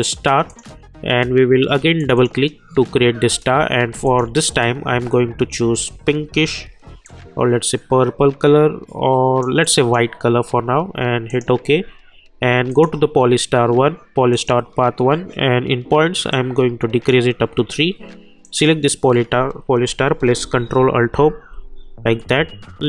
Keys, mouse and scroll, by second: 20.9 ctrl+alt+Home.